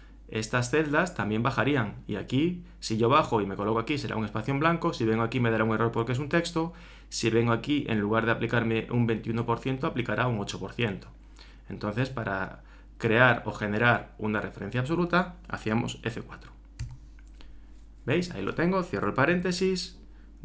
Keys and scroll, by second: 19.4 shift+9.